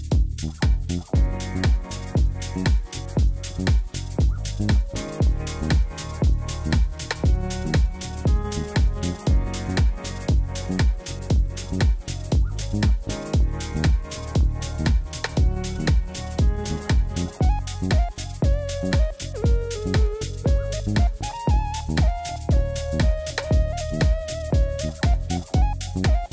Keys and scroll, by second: 5.1 alt+a, 8.2 3, 18.5-19.6 typing, 20.2 Return, 24.0 3, 24.2 Return.